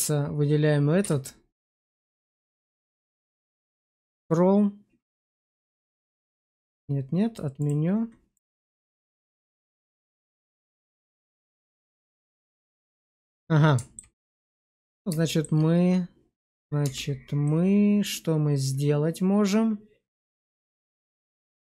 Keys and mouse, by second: 0.9 q, 2.9 q, 7.5 click, 8.2 click, 8.7 click, 9.1 q, 12.4 click, 13.3-13.8 middle drag, 14.3 shift+middle click, 14.5 Tab, 15.1 shift+middle click, 16.7 Tab, 17.3-21.6 middle drag.